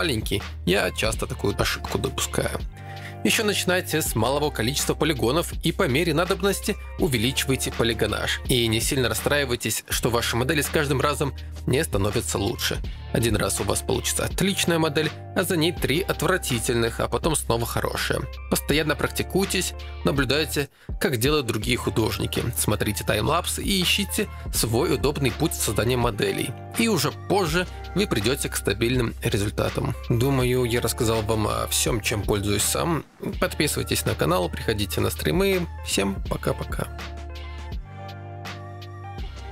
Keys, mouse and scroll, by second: 0.9 f, 2.0 alt+click, 2.5-5.9 typing, 6.7 ctrl+2, 6.8 ctrl+z, 7.9 click, 8.6 click, 8.9 shift+click, 9.6 g, 9.6 f, 10.9 f, 12.4-14.1 typing, 12.6 shift+click, 13.1 click, 15.3 shift+click, 16.8 click, 17.3 click, 17.7-20.1 typing, 21.7 ctrl+click, 22.2 1, 22.3 f, 23.8 g, 23.8 f, 25.4 2, 28.8 g, 28.8 f, 30.2-31.2 typing, 34.0 right click, 34.2 click, 36.1 ctrl+z, 36.1 ctrl+z, 36.4 ctrl+z, 36.7 ctrl+z.